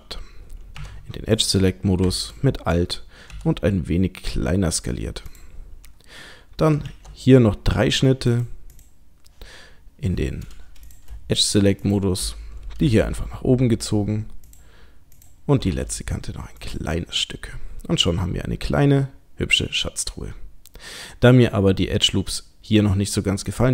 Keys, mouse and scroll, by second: 0.8 2, 1.4 click, 2.2 alt+click, 3.3 s, 6.9 ctrl+r, 10.8 click, 11.4 shift+click, 11.8 shift+click, 12.8 g, 15.2 click, 15.6 g, 17.0 middle click, 23.5 click.